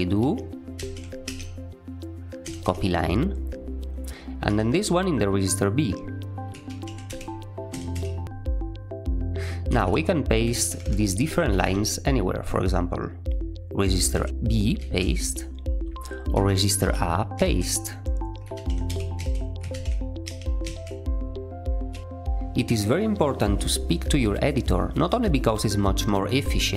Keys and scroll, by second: 0.7-2.5 typing, 4.4 j, 6.6-7.8 typing, 9.6-12.0 typing, 11.2 Escape, 13.7-15.2 typing, 16.4-20.5 typing.